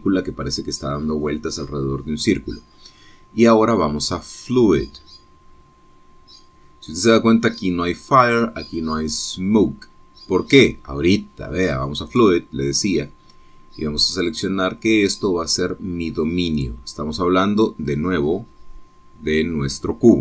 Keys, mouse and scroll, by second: 13.2 click, 15.1 click, 17.7 click.